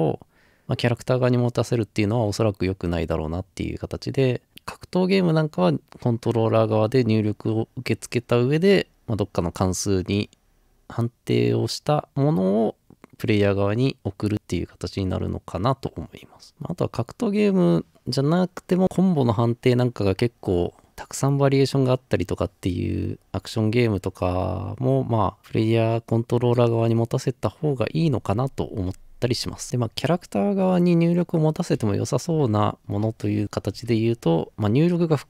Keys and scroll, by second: 32.3-33.7 typing.